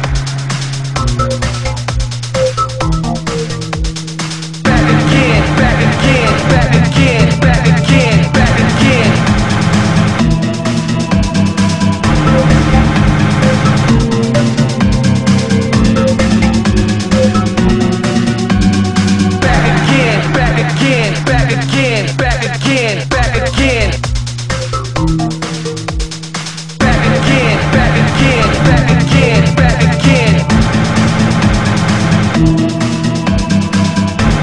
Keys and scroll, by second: 7.8 ctrl+z, 22.2 ctrl+z, 23.4 ctrl+z, 24.8 ctrl+z, 27.7 ctrl+z, 29.1 ctrl+z.